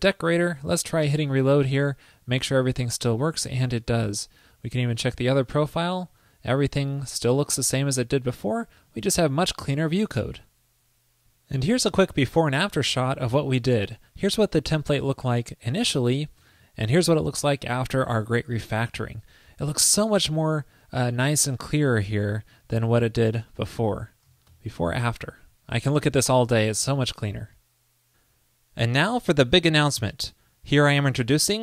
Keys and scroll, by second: 16.8 alt+super+Right, 22.7 alt+super+Left, 24.6 alt+super+Right.